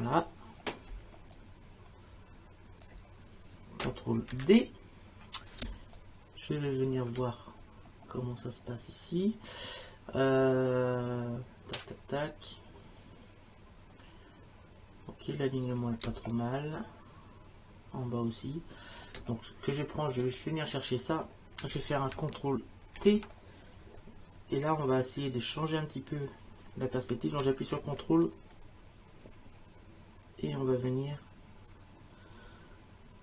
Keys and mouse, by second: 0.9 Return, 1.3 click, 2.8 Return, 4.3 ctrl+d, 5.7 space, 6.0 click, 16.0 space, 16.3 click, 19.0 space, 20.2 click, 23.0 ctrl+t, 28.2 click.